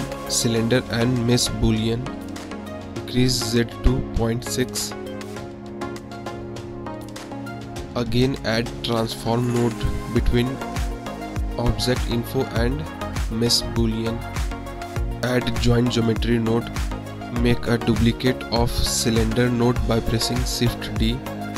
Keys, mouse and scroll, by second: 0.4 click, 1.2 click, 1.6 middle click, 3.1 click, 3.4 click, 3.9 click, 4.1 click, 4.6 click, 4.9 click, 5.9-7.5 middle drag, 8.0 ctrl+z, 8.3 click, 9.0-9.3 drag, 9.6 click, 10.2 click, 10.7 click, 11.1 shift+a, 14.3 click, 15.2 shift+a, 20.5 click, 21.1 shift+d.